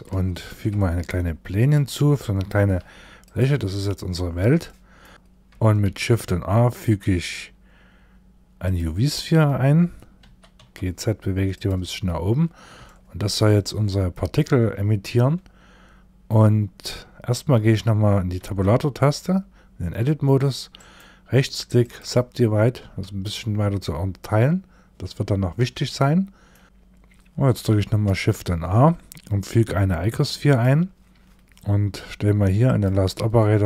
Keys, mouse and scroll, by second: 2.0 s, 3.1 scroll down 3, 3.9 scroll down 1, 4.1 shift+middle click, 4.6 middle click, 5.3 shift+a, 9.7 g, 11.7-12.2 scroll up 3, 12.2 scroll up 1, 12.3 shift+middle click, 13.0 middle click, 17.9 Tab, 19.0-20.2 scroll up 3, 20.2 right click, 22.3 Tab, 23.7-24.8 scroll down 2, 24.8-25.5 scroll down 2, 25.5 shift+middle click, 27.5 shift+a, 32.1 click.